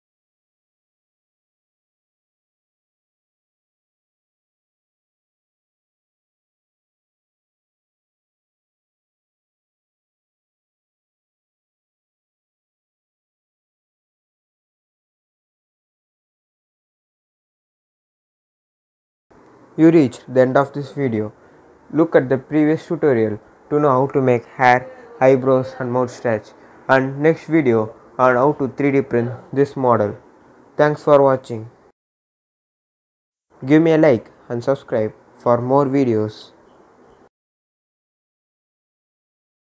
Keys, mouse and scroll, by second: 0.4 click, 1.2-2.6 scroll down 1, 2.6 click, 3.4-4.0 scroll up 1, 4.8 click, 4.9 click, 17.3 click, 19.5 scroll down 1, 22.3 click, 23.0 scroll up 1, 25.4-25.8 scroll down 1, 26.5-29.8 drag.